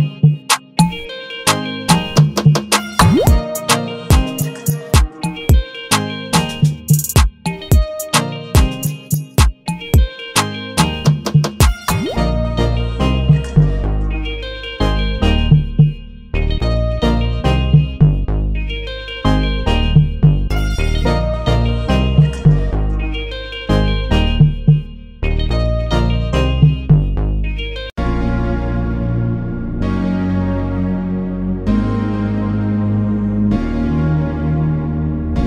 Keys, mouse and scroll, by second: 1.9 ctrl+z.